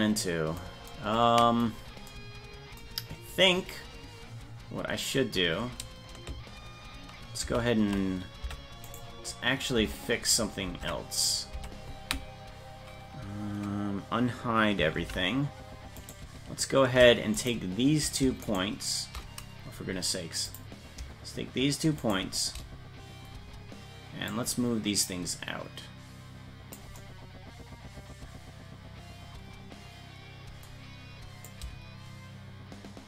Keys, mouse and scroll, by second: 7.5 ctrl+z, 8.4 Tab, 8.8 right click, 9.8 Tab, 10.6 ctrl+Tab, 11.1 right click, 11.5 Tab, 14.9 alt+h, 15.9 right click, 17.3 shift+right click, 18.4 shift+right click, 20.5 click, 22.0 shift+right click, 24.3-26.7 drag, 31.5-33.0 shift+drag.